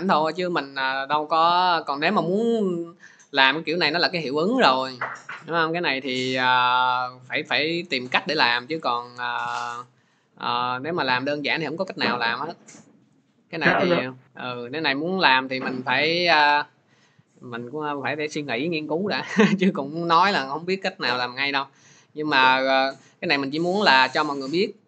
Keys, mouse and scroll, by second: 2.8 click, 5.7-7.9 drag, 22.9-24.8 drag.